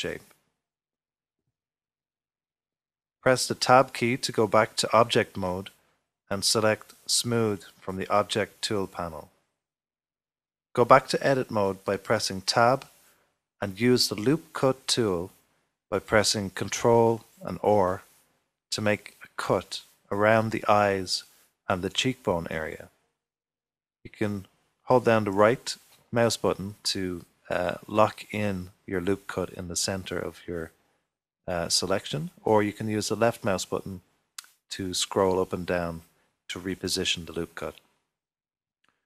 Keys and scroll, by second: 6.8 typing, 8.3 typing, 14.9 Tab, 15.7 typing, 18.1 ctrl+r, 32.3 ctrl+r, 35.3 Escape.